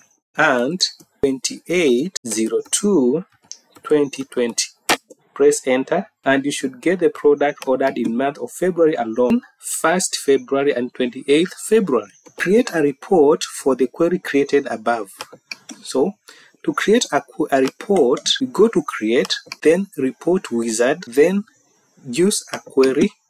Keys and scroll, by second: 12.4 Down.